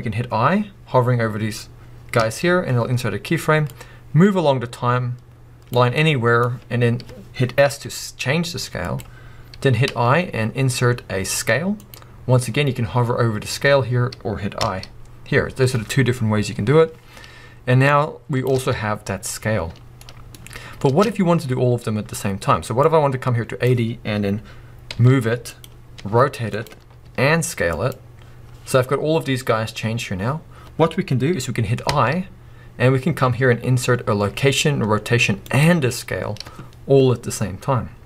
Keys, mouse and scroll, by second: 3.7-6.0 drag, 6.0-9.0 middle drag, 7.6 s, 9.0 click, 9.3-9.9 scroll up 1, 17.9-20.0 drag, 18.5 space, 19.6 scroll down 2, 20.0-22.8 middle drag, 20.8 space, 22.8-25.6 drag, 24.9 g, 26.0 r, 26.6 click, 27.0 s, 27.9 click.